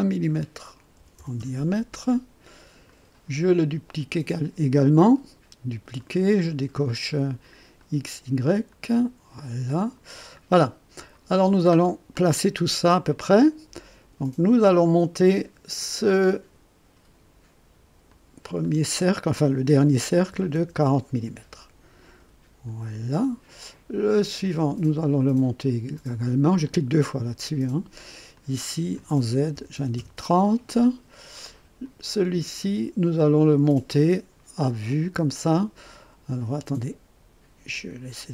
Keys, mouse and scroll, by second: 0.9 KP_2, 1.2 KP_0, 1.4 KP_Enter, 2.8 click, 4.7 click, 5.9 click, 7.7 click, 8.7 click, 11.4-11.7 scroll down 1, 12.1 click, 13.1 right click, 14.5 click, 15.7 click, 16.3 click, 18.0 click, 20.3 KP_4, 20.5 KP_0, 22.6 click, 24.4 click, 25.9 click, 26.6 click, 28.3 click, 29.7 KP_0, 29.9 KP_Enter, 31.8 click, 34.9 click, 37.7 click.